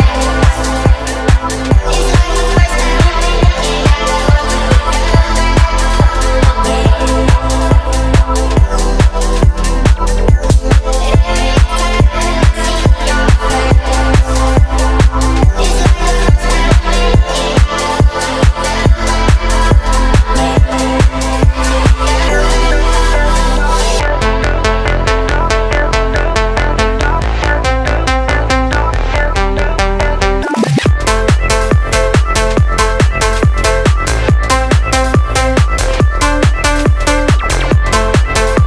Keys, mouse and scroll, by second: 1.3 click, 3.0 space, 6.6 space, 8.8 shift+d, 9.4 z, 14.9-16.3 drag, 17.5 space, 21.5 space, 24.2 shift+a, 30.6-32.3 drag, 35.6-37.8 middle drag, 37.8-38.6 drag.